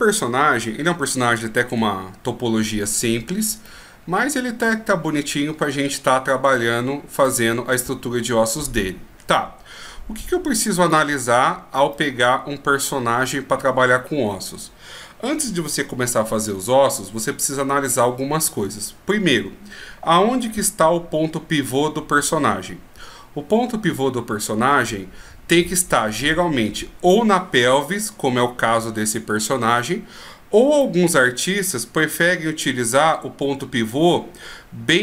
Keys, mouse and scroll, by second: 3.8 middle click, 7.4 middle click, 9.7-10.3 scroll up 1, 10.4 scroll down 1, 10.7 scroll up 2, 11.1 right click, 12.1 middle click, 13.4-13.9 scroll down 1, 31.0 middle click, 32.4 KP_1.